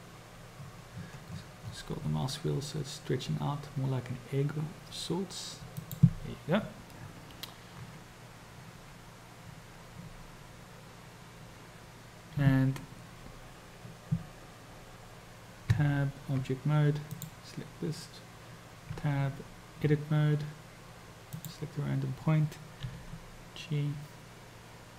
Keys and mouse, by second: 15.7 Tab, 17.2 click, 19.0 Tab, 21.4 click, 23.1 g.